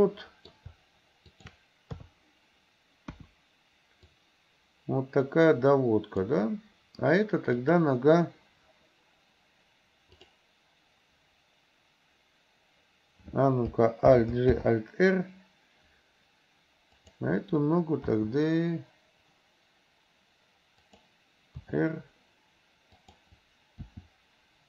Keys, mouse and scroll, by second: 0.0-0.6 middle drag, 1.3 shift+click, 2.0 KP_3, 3.2 KP_1, 4.3-6.3 drag, 7.6 click, 14.1 alt+g, 14.6 alt+r, 18.2 g, 21.7 r, 23.8 f.